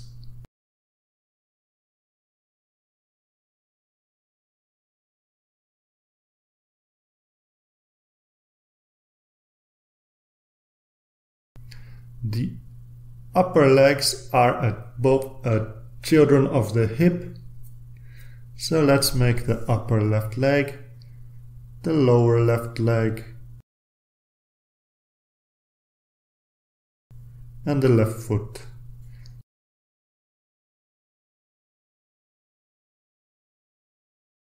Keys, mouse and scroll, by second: 1.0-3.6 drag, 5.6-9.7 drag, 10.9 click, 11.4-12.1 scroll down 1, 12.9-15.4 drag, 16.0-17.8 drag, 17.9 right click, 19.0 click, 19.5-20.3 scroll down 2, 20.6-22.7 drag, 23.4-25.5 drag, 26.1 ctrl+s, 26.6-27.5 ctrl+scroll down 3, 27.8 right click, 29.2-29.9 drag, 30.4-31.9 drag, 32.4-34.1 drag, 34.1-34.5 scroll up 2.